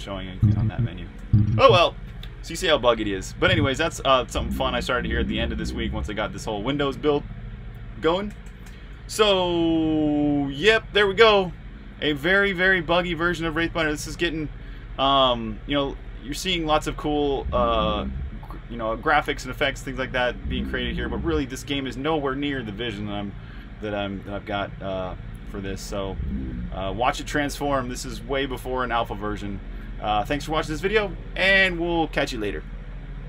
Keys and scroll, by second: 2.5-7.1 typing, 8.3-21.0 typing, 23.0-25.9 typing, 27.0-30.3 typing.